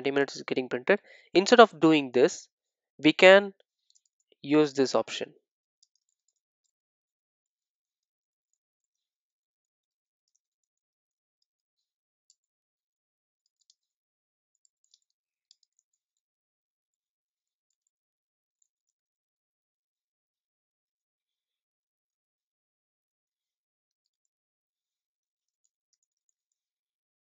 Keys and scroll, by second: 21.6 super+d.